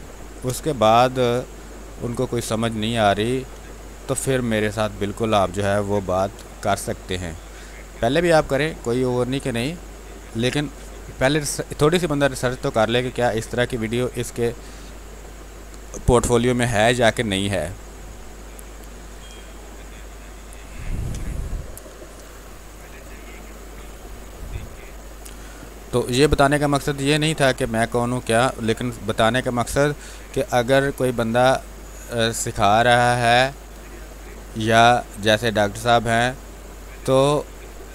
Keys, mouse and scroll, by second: 2.2 ctrl+click, 4.2 click, 6.2 b, 8.2-19.2 drag, 19.2 space, 19.5 click, 19.8 space, 20.1 alt+click, 23.0 space, 23.4 alt+click, 25.1 click, 25.6 ctrl+d, 26.2 ctrl+space, 26.4 ctrl+click, 26.7 ctrl+space, 27.1 ctrl+click, 27.2 ctrl+space, 28.1 click, 28.9 r, 29.0 click, 30.0 b, 30.3 space, 30.5 ctrl+click, 31.1 click, 33.0 click, 33.9 ctrl+z, 34.3-36.9 drag, 36.9-37.9 drag.